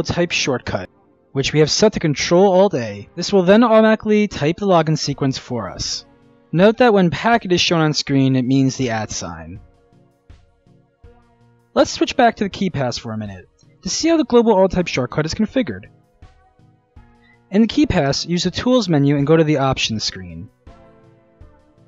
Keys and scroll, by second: 3.1 ctrl+alt+a, 3.2-4.0 typing.